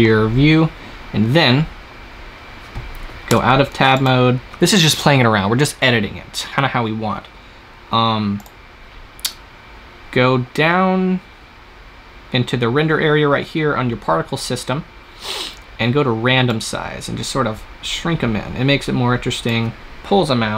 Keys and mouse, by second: 3.2 Tab, 3.8-5.8 drag, 8.2-13.8 drag, 16.3-19.2 drag.